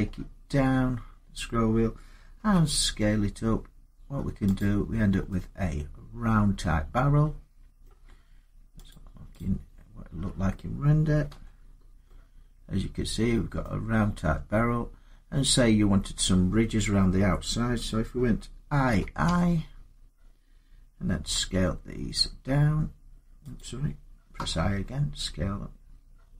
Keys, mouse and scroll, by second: 2.2 s, 4.4 click, 5.7 scroll, 7.6-8.6 middle click, 8.5 scroll up 10, 8.7 click, 9.1 click, 11.1 Tab, 12.2 scroll up 1, 13.4 middle click, 14.0 Tab, 18.7-19.0 typing, 21.0 s, 23.4 click, 24.2 i.